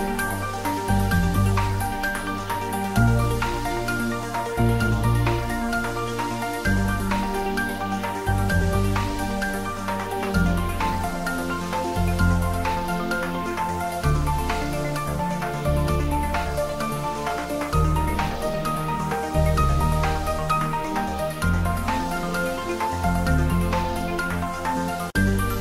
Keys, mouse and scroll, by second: 0.1 click, 0.2 click, 0.3 Tab, 0.7 ctrl+middle click, 1.8 click, 2.1 shift+middle click, 2.6 ctrl+middle click, 3.1 click, 4.0 shift+click, 5.3 click, 5.7 shift+click, 11.8 click, 12.3 alt+e, 12.8 click, 16.0 click, 16.1 Tab, 16.4 middle click, 17.5 3, 18.0 middle click, 18.5 ctrl+middle click, 19.6 Tab, 22.5 Tab, 22.8 ctrl+r, 25.3 click.